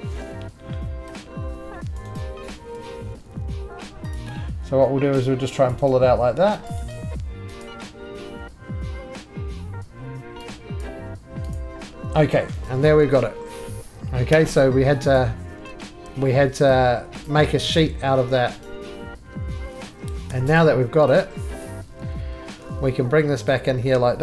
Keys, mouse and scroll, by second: 0.1 d, 1.9 click, 2.2 right click, 2.5 3, 4.1 click, 5.6 click, 5.9 right click, 6.2 3, 6.7 click, 6.9 right click, 7.6 click, 10.8 click, 11.5 click, 12.4 middle click, 12.7 right click, 14.3 4, 14.6 click, 15.2 click, 16.0 ctrl+z, 16.0 click, 16.0 3, 17.2 click, 17.8 click, 18.7 right click, 20.3 4, 20.6 click, 21.2 click, 22.6 g.